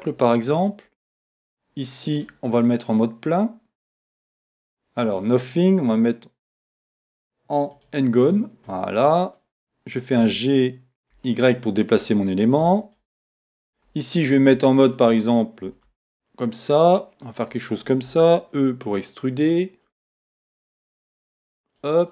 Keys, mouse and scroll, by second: 2.1 click, 5.1-8.4 drag, 8.4-12.0 middle drag, 10.2 g, 12.0 click, 12.7-17.4 middle drag, 13.8 Tab, 14.1 scroll up 1, 15.7 e, 17.4 click, 18.1 e, 19.9 click, 20.6 e, 21.9 click.